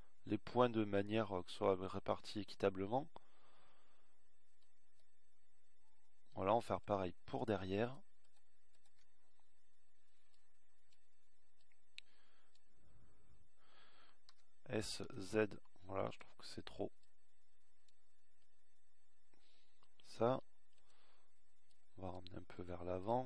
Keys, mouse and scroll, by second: 15.9 s.